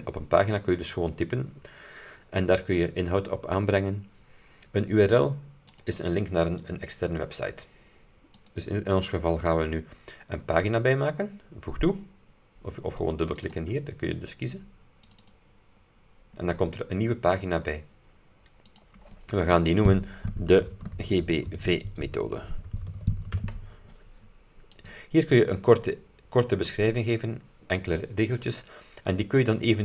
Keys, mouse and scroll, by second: 5.8 click, 8.4 click, 13.4 click, 15.2 click, 18.9 click, 20.2-23.9 typing, 24.8 click.